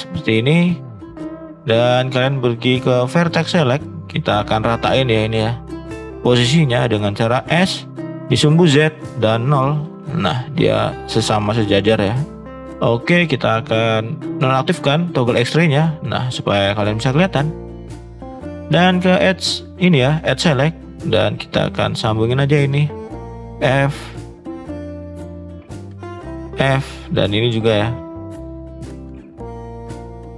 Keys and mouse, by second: 2.9 click, 3.7 click, 7.4 s, 12.4-12.7 middle drag, 16.1 middle click, 17.4 shift+middle click, 21.0 click, 21.5 click, 21.9 shift+click, 22.4 shift+click, 23.3 f, 23.7 middle drag, 24.7 click, 26.5 f, 26.9-27.4 middle drag, 27.8 middle click, 28.1 middle click, 28.6 click, 29.5 click, 29.8 middle click.